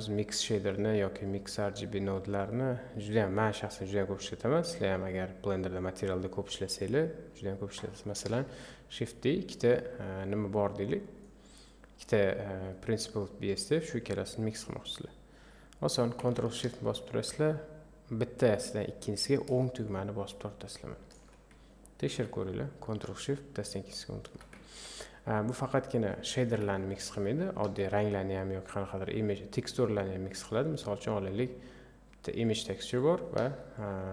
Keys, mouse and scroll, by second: 2.3-8.5 drag, 8.5 shift+d, 21.0-22.1 ctrl+shift+right drag, 22.1 ctrl+z, 24.1 ctrl+shift+right click, 24.7 ctrl+z, 26.0 click, 26.5 Delete, 26.7 scroll up 1, 33.9 click.